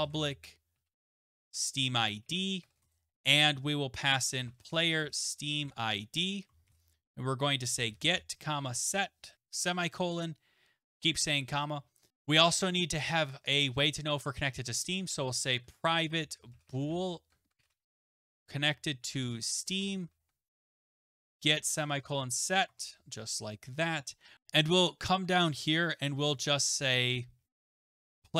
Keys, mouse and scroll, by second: 0.0-9.3 typing, 11.8-12.6 typing, 14.6-24.3 typing, 22.7 Tab, 25.6 click, 26.1 Return, 27.3-28.3 typing.